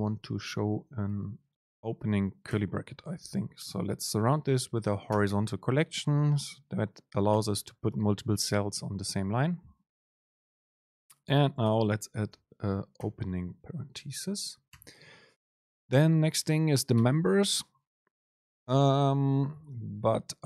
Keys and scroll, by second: 5.8 Right, 7.4 Right, 12.5 Return, 14.2 Return, 15.3 Return, 15.3 super+space, 19.1 Right, 19.5 shift+Left.